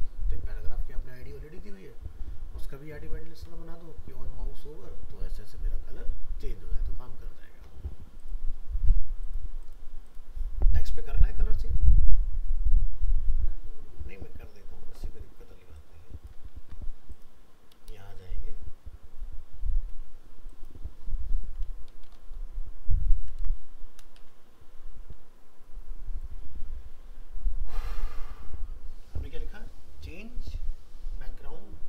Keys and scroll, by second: 16.6 ctrl+c, 18.1 ctrl+v.